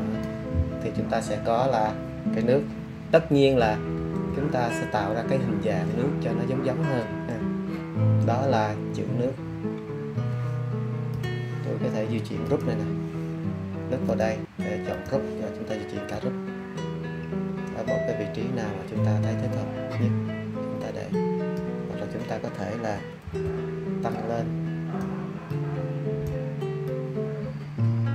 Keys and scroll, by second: 3.9 super+z, 23.2 super+t.